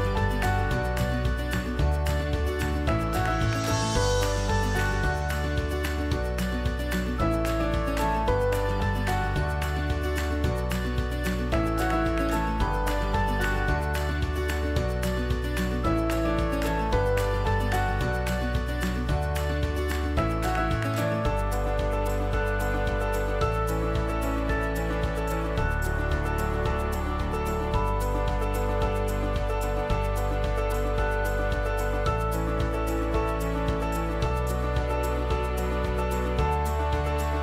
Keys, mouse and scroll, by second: 18.3-23.1 alt+drag, 30.7-36.5 drag.